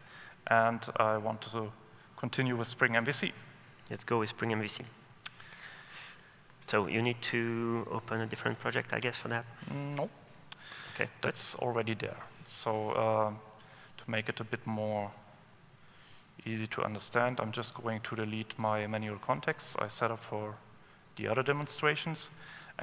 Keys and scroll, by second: 7.7 super+w, 9.5 super+w.